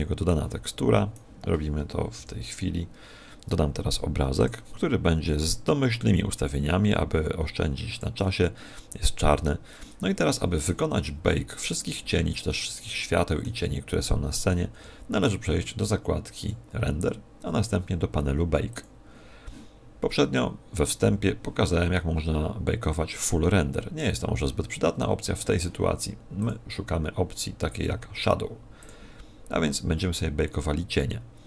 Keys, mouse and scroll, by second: 0.3 click, 2.1 shift+F10, 4.3 click, 5.9 click, 8.7-10.6 scroll down 4, 12.5 shift+middle click, 14.7 Tab, 16.3 click, 18.7 click, 26.3 click.